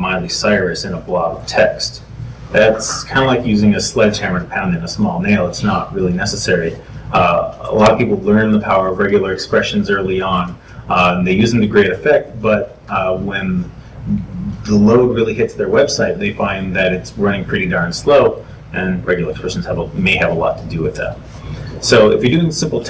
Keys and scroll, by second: 21.1 super+Tab, 21.8 super+Tab.